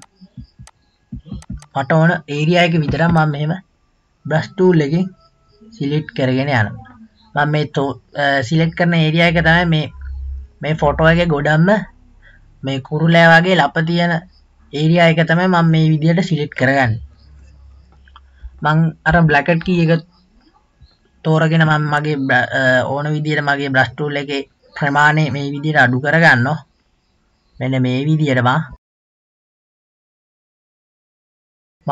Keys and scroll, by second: 18.6 [, 19.2 [, 19.7 [.